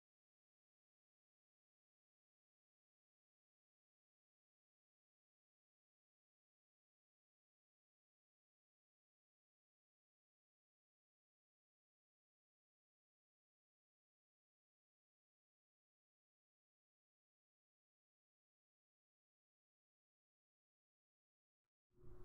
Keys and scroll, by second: 0.1 l, 2.2 2, 2.8 Right, 3.6-8.2 typing, 9.5 Right, 10.4-20.3 typing, 21.2 Right, 21.8-22.2 typing.